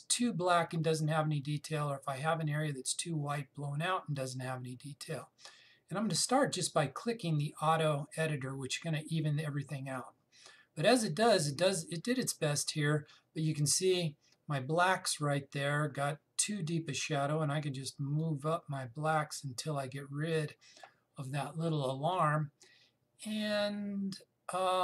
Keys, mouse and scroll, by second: 8.0 click, 18.8 click.